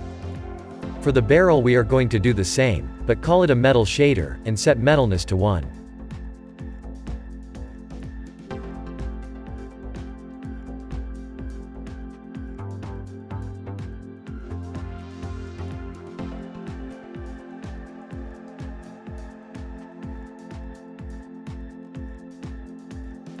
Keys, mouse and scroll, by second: 0.9 click, 2.5-12.5 drag, 19.5 click, 19.8-20.3 scroll down 1, 20.3-23.4 shift+middle drag.